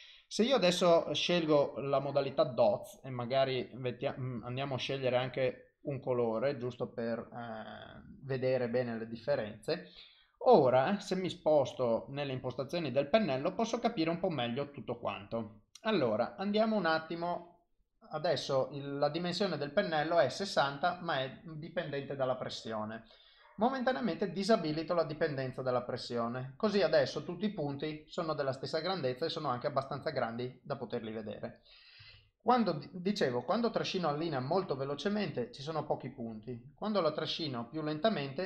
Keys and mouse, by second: 4.0 click, 7.4 click, 9.5 ctrl+z, 11.6 click, 17.3 click, 24.3 click, 25.1 click, 26.8 ctrl+z, 27.2 click, 30.2 ctrl+z, 30.4 click, 32.2 ctrl+z, 33.8 click, 36.0 click.